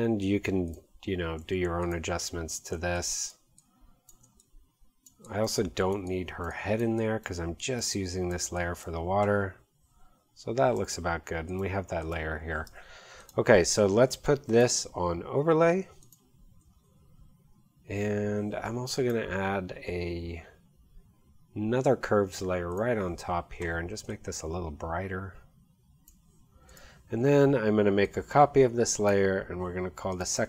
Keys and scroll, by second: 1.4 x, 10.8 v.